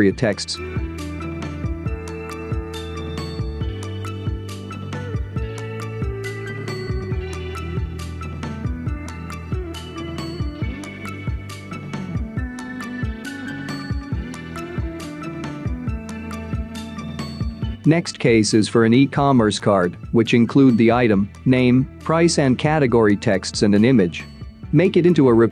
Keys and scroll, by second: 10.7-11.5 space, 13.1-14.0 space, 16.5-17.5 space, 19.2 space.